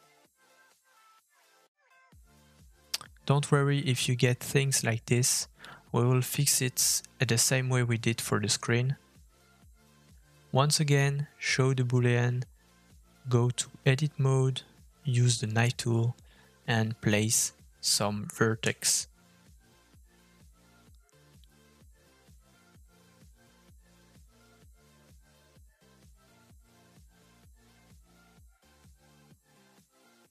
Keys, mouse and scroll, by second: 7.8 middle click, 8.2 shift+middle click, 8.4-8.8 scroll up 2, 13.5-14.6 scroll down 2, 15.2 middle click, 16.0 click, 16.9 shift+middle click, 17.4 Tab, 18.8 middle click, 19.7 k, 20.6 middle click, 26.3 middle click, 28.6 Tab.